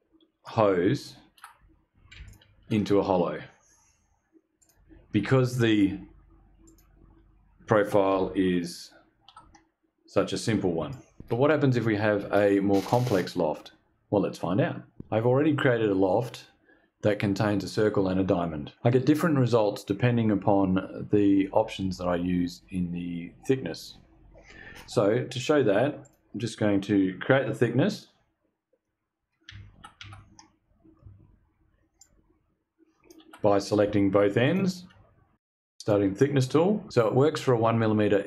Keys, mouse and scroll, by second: 1.7 ctrl+click, 4.1 click, 6.1 click, 9.0 shift+click, 10.4 shift+click, 25.5 click, 28.3-28.9 scroll down 4, 29.8 shift+click, 31.4-32.7 shift+drag, 33.9 ctrl+click, 35.2 click.